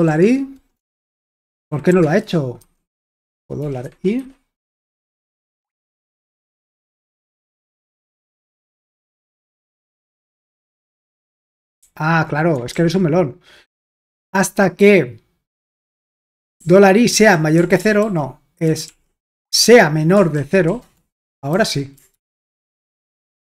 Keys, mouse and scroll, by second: 0.0-7.1 typing, 4.2 Escape, 5.6 Escape, 7.3 super+h, 7.9 ctrl+p, 8.2 Return, 11.8 typing, 12.7 super+l, 14.2 j, 16.6-20.9 typing, 19.4 Escape, 21.5 super+h, 22.1 ctrl+p, 22.5 Return.